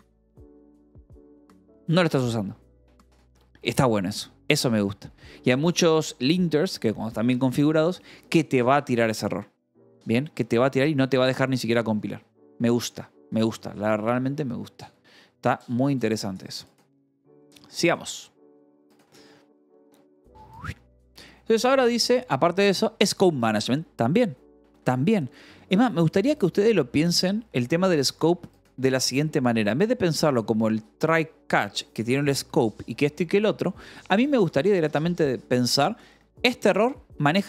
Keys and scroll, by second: 1.6 j, 1.9 k, 3.6 u, 6.9 ctrl+s, 8.5 u, 9.6 d, 10.6 ctrl+s.